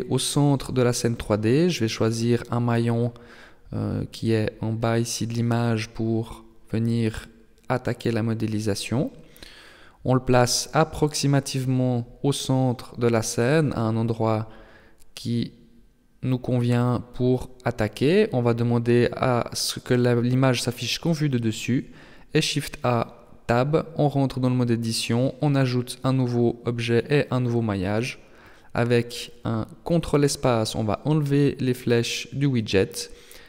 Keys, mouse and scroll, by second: 4.2 shift+click, 8.6 scroll up 5, 9.4-10.6 scroll up 1, 10.6 shift+click, 13.7 shift+click, 17.2 click, 20.2 shift+a, 22.2 Tab, 23.5 z, 24.3 s, 26.2 shift+space, 30.3 ctrl+space, 31.8 t, 32.8 n.